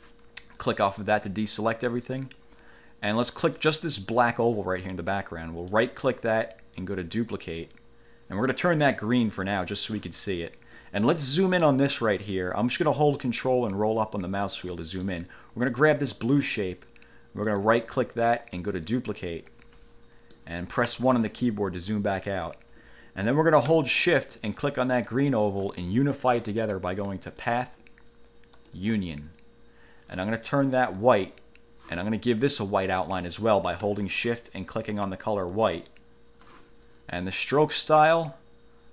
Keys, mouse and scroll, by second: 0.7 click, 4.3 click, 5.9 right click, 7.3 click, 9.4 click, 13.5-14.1 ctrl+scroll up 2, 14.1-14.9 ctrl+scroll up 1, 14.9 ctrl+middle click, 16.2 click, 17.7 right click, 18.9 click, 20.5 middle click, 21.1 1, 21.6-22.5 middle drag, 25.1 shift+click, 27.6 click, 28.7 click, 31.1 click, 35.7 shift+click, 38.1-38.9 drag.